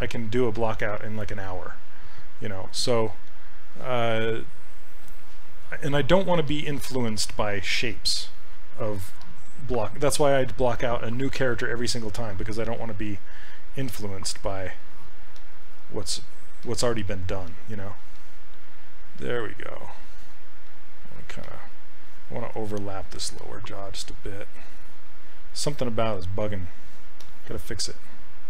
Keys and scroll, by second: 9.2 s.